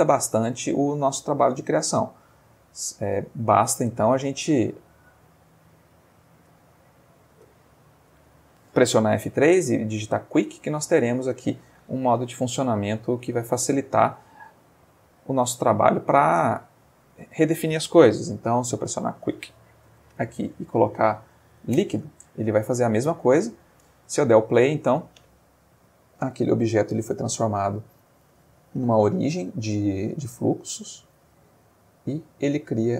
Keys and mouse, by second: 0.5 click, 2.5 click, 3.3 click, 3.9 space, 5.8 click, 6.4 space, 7.3 space, 9.0 F3, 10.8 Escape, 12.6 click, 13.5 click, 14.9 click, 16.0-17.2 middle drag, 18.2 F3, 18.7 q, 19.8 u, 19.9 i, 21.2 Down, 21.8 Return, 23.3-23.9 middle drag, 24.1 space, 32.4 click.